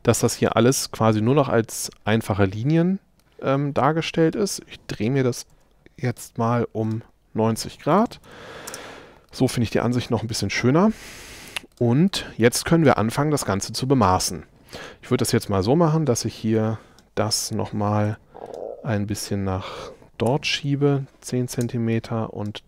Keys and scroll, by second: 5.6 q, 8.0 9, 8.3 Return, 8.7 space, 18.1 m, 20.3 1, 20.6 Return.